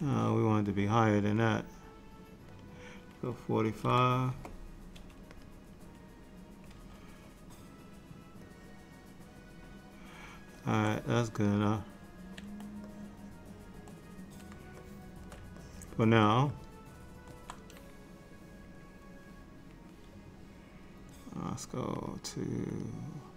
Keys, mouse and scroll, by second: 0.0 ctrl+z, 1.5 click, 8.6 middle click, 11.8 click, 13.0 middle click, 14.9 shift+middle click, 15.7 ctrl+middle click, 16.6 middle click, 21.5 click, 22.8 click.